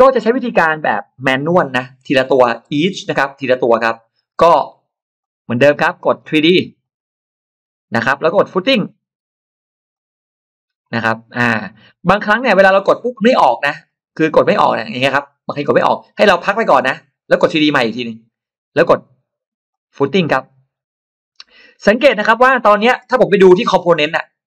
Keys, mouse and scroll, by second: 1.9-2.7 scroll down 2, 2.2 middle click, 3.2 middle click, 5.0 click, 6.7 click, 9.8 click, 12.4 click, 13.1 click, 13.7 click, 15.6 click, 16.6 click, 17.8 click, 19.5 click.